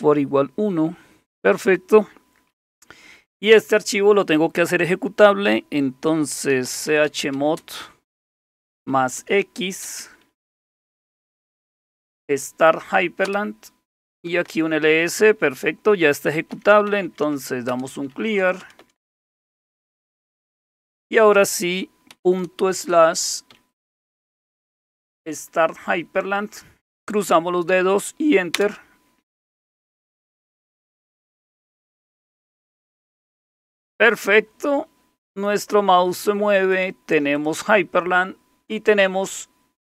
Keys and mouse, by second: 6.3-12.4 typing, 13.2 Return, 13.9-14.6 typing, 16.3-21.0 typing, 22.1-24.5 typing, 24.9 Tab, 28.5 Return, 36.6 click, 37.4 click.